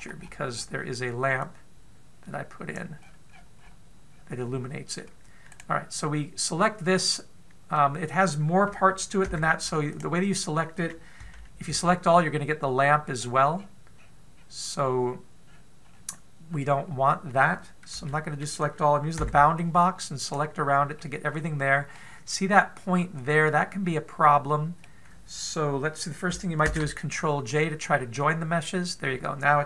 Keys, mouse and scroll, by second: 0.5-1.4 scroll down 17, 2.1 click, 3.6-4.9 scroll up 15, 6.1 right click, 7.6 scroll up 1, 7.9 middle click, 9.8 b, 11.8 a, 12.3 a, 12.7-13.2 scroll down 5, 13.7-14.6 scroll down 3, 14.1-14.6 scroll up 2, 14.6-14.9 scroll down 1, 14.9-15.6 scroll down 2, 16.0-17.0 scroll up 2, 17.0 scroll up 2, 18.6 a, 19.7 b, 21.5 middle click, 24.5 middle click, 28.9 ctrl+j.